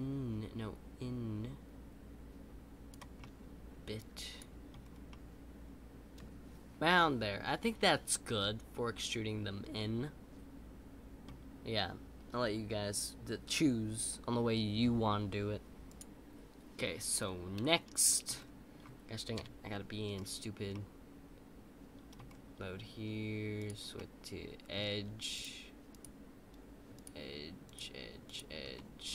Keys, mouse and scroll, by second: 3.2-4.8 middle drag, 4.8 scroll down 2, 5.1-8.1 middle drag, 17.1-17.7 scroll up 3, 17.7 middle click, 18.3-19.3 scroll down 3, 19.3 KP_5, 20.1-20.7 scroll up 5, 20.7-22.2 middle drag, 22.2-22.8 scroll up 2, 23.9-25.3 middle drag, 26.9 shift+click, 28.7 middle click.